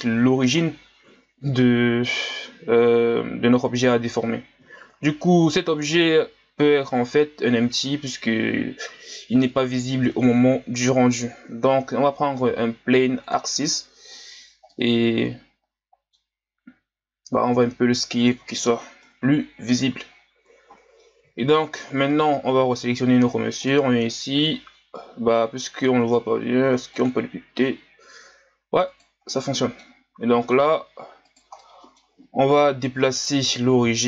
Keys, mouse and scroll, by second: 0.0 KP_1, 4.8 shift+a, 13.9 scroll up 2, 14.7-16.7 middle drag, 16.7 s, 19.0 KP_1, 21.3-22.1 shift+scroll up 2, 22.1 right click, 23.6 click, 28.9 right click, 29.3 middle click, 30.0-30.6 scroll down 1, 30.6 s, 31.6-32.5 middle drag, 32.5 KP_1, 33.9 g.